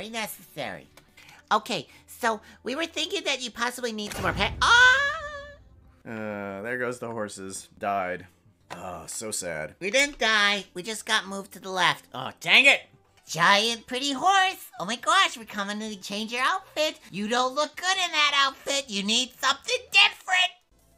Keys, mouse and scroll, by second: 1.0 space.